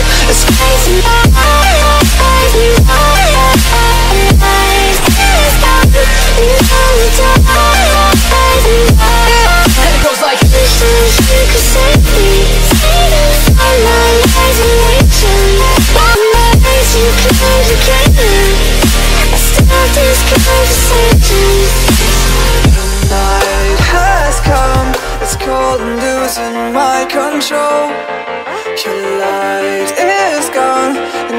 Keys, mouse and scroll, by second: 0.2 click, 0.9 click, 4.3 click, 5.1 click, 6.2 click, 6.5-8.2 typing, 8.4 click, 9.5 click, 10.3 click, 11.3 middle click, 11.4 middle click, 13.3 click, 13.6 click, 15.5 middle click, 15.6 middle click, 16.2 middle click, 17.2 click, 17.9 F9, 22.7 click, 23.5 click, 25.0 click, 25.8 click, 26.9 middle click, 28.4 click, 28.7-30.8 typing, 30.1 middle click, 30.3 middle click.